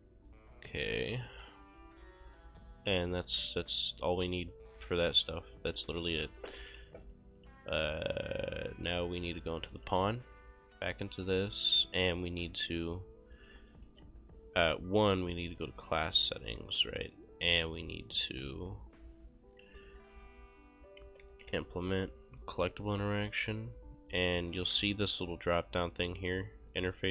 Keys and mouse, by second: 0.9 click, 3.0 click, 5.4 click, 6.0 right click, 6.4 ctrl+space, 6.6 click, 6.8 ctrl+shift+s, 7.4 click, 9.2 click, 10.5 click, 11.1 right click, 13.9 c, 14.5 Escape, 15.6 click, 17.4 click, 21.0-21.9 typing, 22.5 click, 24.3 click.